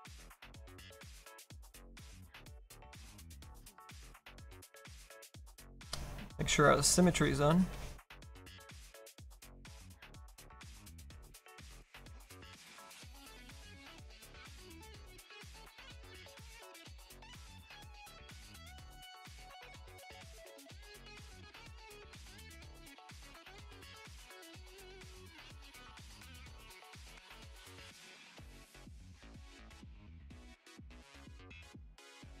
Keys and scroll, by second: 2.3 x, 2.8 x, 11.0 ctrl+z, 20.4 s.